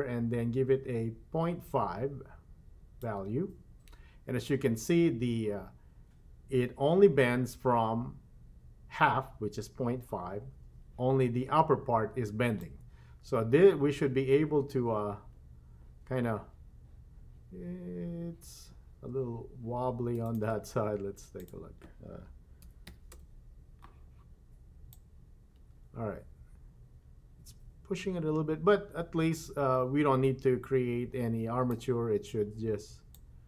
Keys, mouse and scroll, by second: 12.6-20.2 drag, 21.3-23.2 drag, 24.9-31.8 drag, 33.1-33.4 drag.